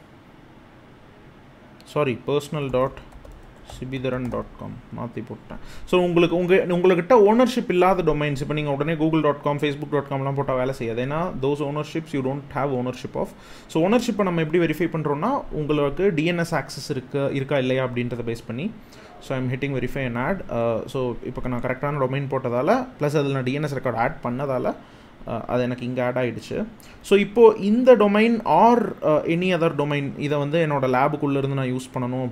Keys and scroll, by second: 1.9-4.5 typing, 26.7 super+c.